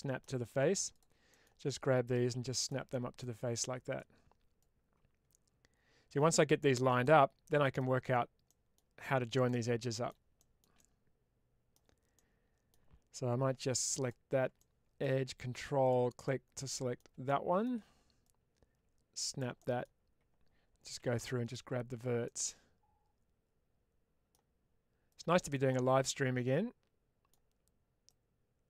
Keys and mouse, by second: 0.8 click, 1.2 middle click, 1.6 click, 2.8 middle click, 3.8-6.6 drag, 6.9 middle click, 8.3 middle click, 9.3 middle click, 10.2 shift+middle click, 12.0 middle click, 13.3 2, 13.9 click, 14.5 middle click, 15.7 ctrl+click, 15.7 typing, 16.2 middle click, 17.1 shift+middle click, 18.2-19.3 drag, 19.4 middle click, 20.9 1, 21.1 middle click, 22.1-24.2 middle drag, 24.9 click, 25.4-27.2 middle drag, 28.0-28.6 drag.